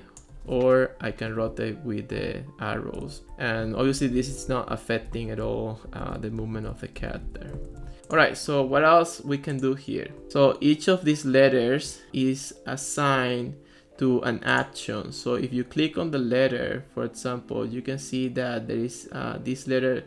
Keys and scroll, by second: 1.1 Right, 1.5 Left, 2.3 Right, 2.8-8.2 typing.